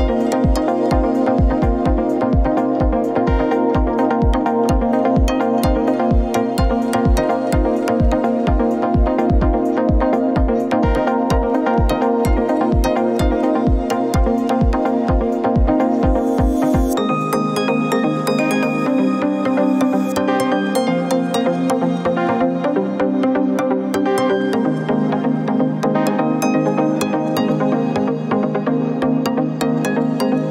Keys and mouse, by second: 2.2-3.0 middle drag, 4.1-5.2 middle drag, 5.5 shift+middle click, 9.6-10.8 drag, 13.3 click, 14.3 click, 16.3 click, 16.8 alt+shift+click, 20.1 ctrl+KP_Add.